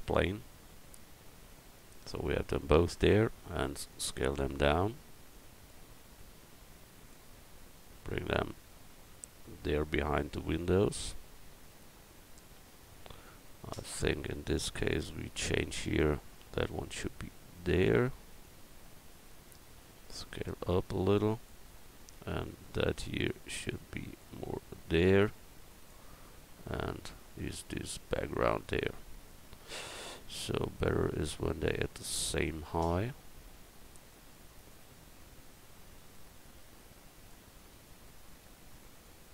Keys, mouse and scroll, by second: 3.0 s, 3.9 click, 6.1 click, 10.4 middle click, 10.9 middle click, 11.6 middle click, 19.9 s, 21.3 s, 24.5 s, 28.0 middle click, 29.7-33.6 right drag, 31.2-33.6 drag, 34.7-38.1 drag.